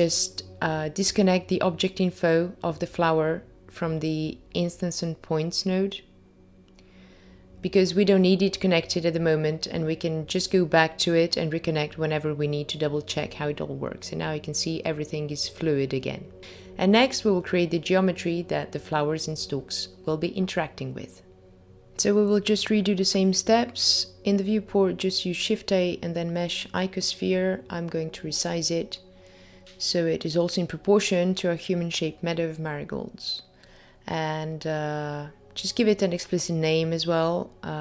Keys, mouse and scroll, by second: 2.0 middle click, 3.3-4.6 scroll down 3, 3.8 middle click, 5.3 middle click, 12.4 middle click, 13.6 click, 14.6-15.5 scroll down 4, 15.5 middle click, 15.5 scroll down 1, 16.5-17.5 scroll down 2, 17.6 shift+middle click, 19.3 click, 19.8 shift+a, 20.0 click, 21.9-22.9 scroll down 5, 24.1 click, 30.0 click, 35.1 click, 35.6-36.4 scroll up 3, 36.4 scroll up 1, 36.5 click.